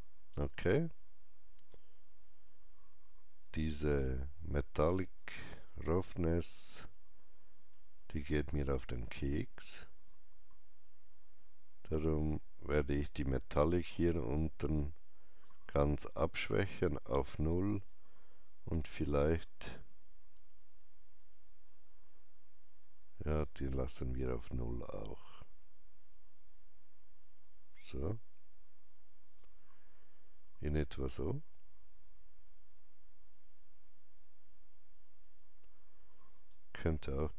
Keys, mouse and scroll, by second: 5.1 click, 5.1-6.5 scroll up 1, 7.5 scroll down 1, 10.0-24.8 drag, 10.0-10.3 scroll down 1, 24.8-31.8 alt+drag, 36.2-37.3 alt+drag.